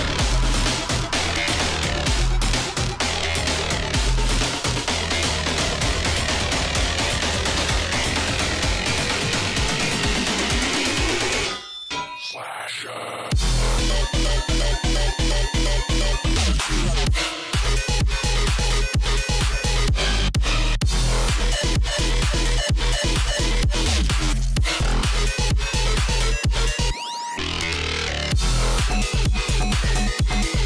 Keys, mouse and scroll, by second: 3.6 click, 5.4-8.4 drag, 9.8-13.8 drag, 15.4-18.9 drag, 20.4-21.1 scroll up 1, 21.5 alt+scroll up 1, 21.9 alt+scroll down 1, 22.3 click, 23.9 click, 27.9 click, 30.4 alt+scroll up 1.